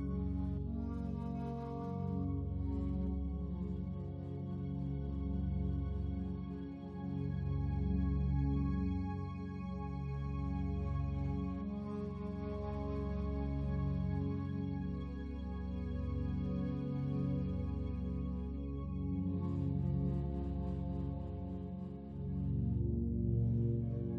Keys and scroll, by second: 20.9 ctrl+t.